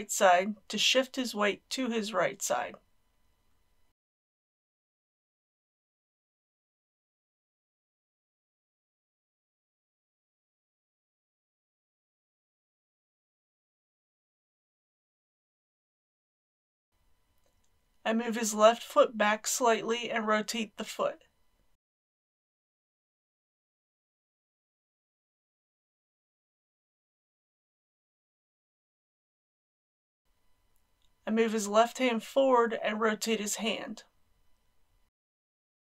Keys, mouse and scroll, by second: 1.9 r, 5.0 click, 7.0 r, 8.8 click, 9.8 ctrl+z, 10.1 r, 11.5 click, 13.0 click, 13.2 g, 13.8 click, 14.3 g, 14.7 z, 15.7 KP_1, 16.0 scroll down 1, 17.3 shift+middle click, 19.1 click, 20.4 g, 20.7 x, 23.3 click, 24.1 typing, 27.8-32.7 drag, 33.6 g, 35.3 click.